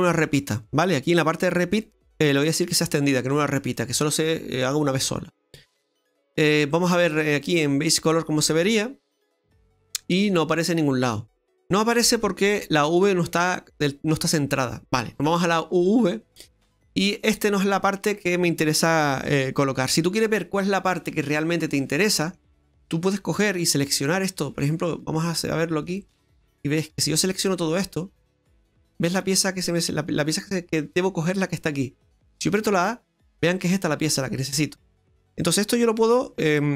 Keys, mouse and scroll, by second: 1.7 click, 3.5 scroll down 3, 3.7 middle click, 6.4 click, 8.3-9.0 scroll down 1, 9.3 middle click, 10.3 middle click, 11.3 middle click, 11.4 middle click, 16.1 click, 16.8 middle click, 18.0 right click, 20.9 middle click, 24.0 right click, 25.9 click, 26.7 right click, 27.1 shift+right click, 27.6 right click, 28.8 shift+right click, 32.4 a, 33.5 right click, 34.9 right click.